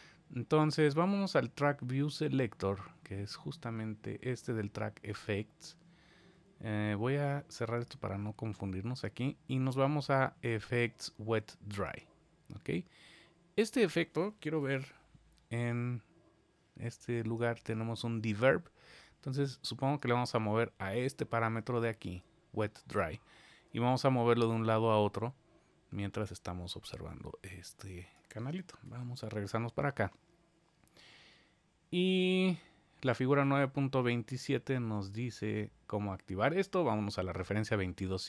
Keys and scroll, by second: 14.5 super+=, 28.8 super+=.